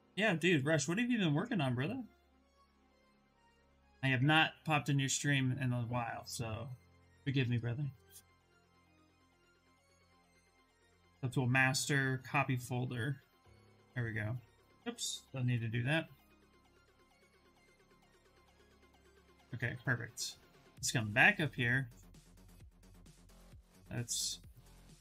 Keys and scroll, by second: 15.1 Escape.